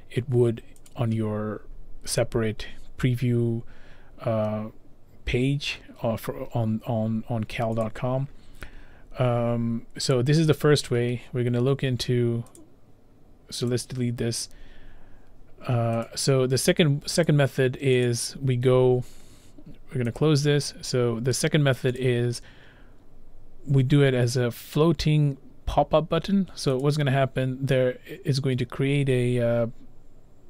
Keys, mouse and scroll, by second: 1.0 click, 7.9 click, 10.6 click, 11.1-11.6 scroll, 12.6 click, 13.7 click, 18.1 click, 20.2 click, 22.0 click, 25.4 click, 26.9 click.